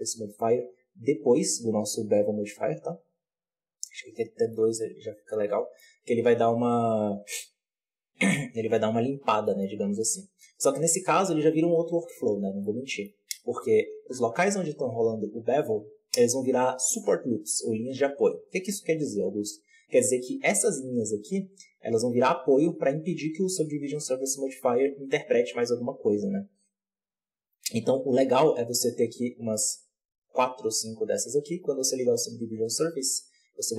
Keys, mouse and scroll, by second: 3.9 click, 4.4-6.0 middle drag, 6.0-9.0 scroll up 1, 9.0-9.4 scroll down 2, 9.4 middle click, 9.6-10.4 scroll up 1, 10.4 right click, 11.9 click, 12.5-13.9 middle drag, 13.9 alt+a, 19.6 click, 20.2-23.3 scroll up 1, 29.3-32.4 drag.